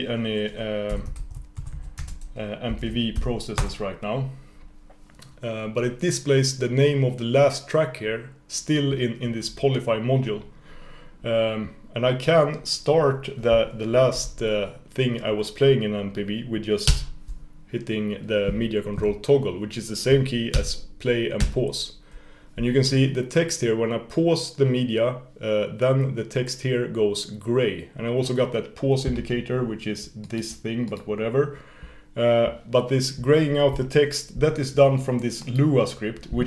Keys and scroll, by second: 17.0 super+/.